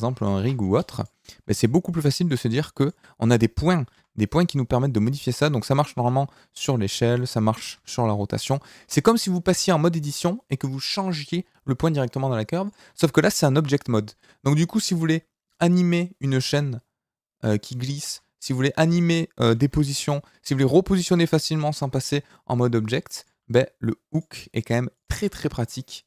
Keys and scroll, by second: 3.9 g, 5.3 Escape, 5.9 s, 7.1 Escape, 7.7 r, 8.9 Escape, 9.5 Tab, 13.5 g, 18.1 Escape, 19.7 g.